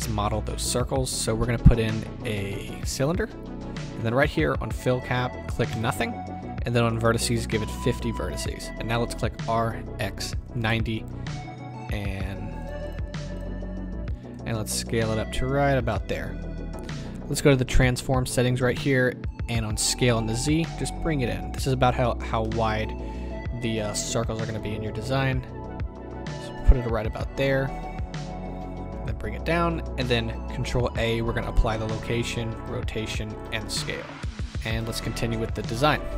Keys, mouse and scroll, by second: 5.0-8.6 drag, 9.3 r, 10.7 KP_Enter, 11.2-12.6 scroll up 2, 12.6 click, 12.8 click, 14.3-15.9 drag, 15.9-18.7 middle drag, 18.7 click, 20.2-22.4 drag, 22.1-22.4 scroll up 2, 22.4-25.2 middle drag, 25.2-36.1 drag, 30.6 ctrl+a.